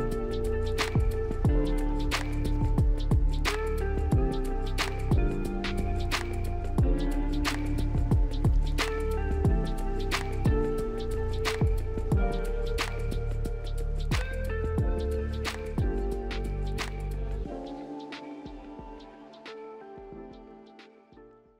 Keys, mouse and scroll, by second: 1.7 ctrl+click, 2.3 ctrl+click, 7.0 middle click, 13.5 alt+middle click, 17.2 middle click, 18.0-18.3 scroll down 2, 18.5 alt+middle click.